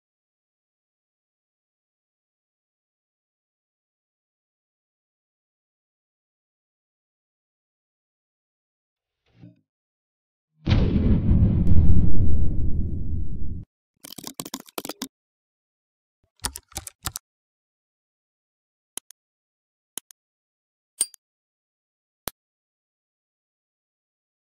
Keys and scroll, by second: 7.1 ctrl+alt+o.